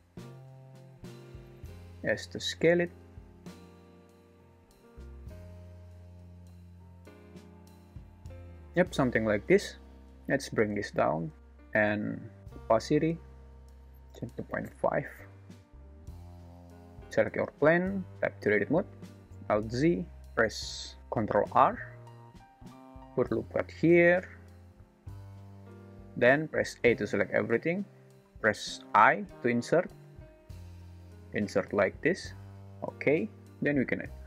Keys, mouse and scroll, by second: 1.8 s, 3.4 r, 7.1 g, 7.7 s, 10.4 g, 13.6-14.7 drag, 17.9 Tab, 19.1 alt+z, 19.6 1, 21.3 ctrl+r, 26.8 a, 28.9 i.